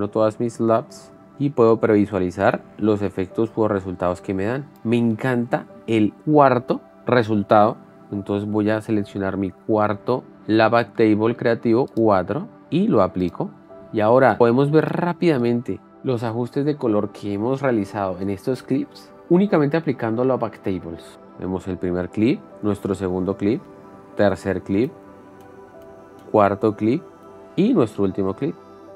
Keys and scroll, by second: 1.2 shift+f, 8.8 shift+f, 15.9 shift+d, 21.1 shift+d, 22.7 shift+d, 24.0 Down, 24.7 shift+d, 26.7 shift+d, 27.3 Down.